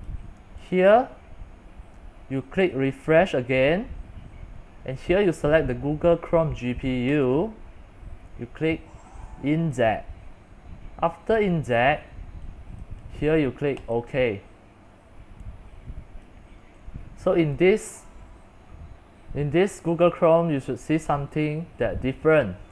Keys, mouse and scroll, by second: 0.0-22.7 drag.